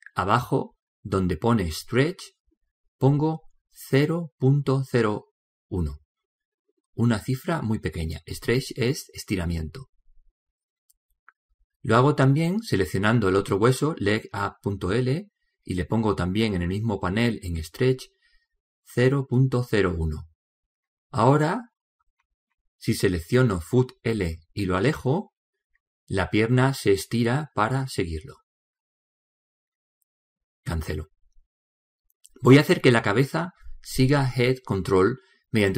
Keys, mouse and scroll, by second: 2.5 click, 12.7 right click, 15.2 click, 21.4 right click, 25.4-27.2 drag, 34.7 alt+g.